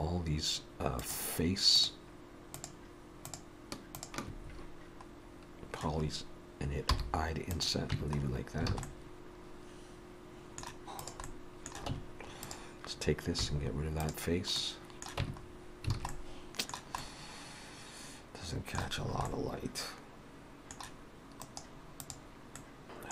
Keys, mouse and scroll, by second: 0.2-4.3 shift+click, 6.9 i, 7.9 Tab, 8.3-8.7 scroll down 3, 8.7 alt+a, 8.9 middle click, 11.0 click, 11.3 middle click, 11.9 Tab, 12.4 click, 13.4 x, 14.6 middle click, 15.3 Tab, 15.5-16.0 scroll down 3, 16.0 alt+a, 16.1 middle click, 17.0 Tab, 17.0 middle click, 19.1-20.0 scroll up 2, 19.3 middle click, 21.5 right click, 22.6 middle click, 22.8 Tab, 22.8 middle click, 22.8-23.1 scroll down 5.